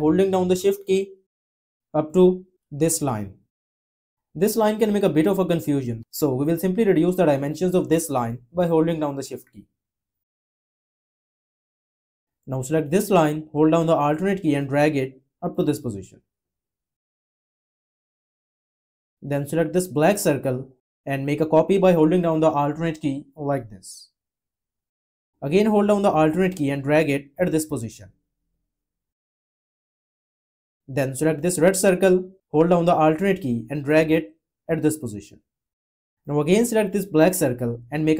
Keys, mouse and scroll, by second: 0.3 shift+click, 9.0 shift+click, 22.2 alt+click, 26.1 alt+click, 32.7 alt+click.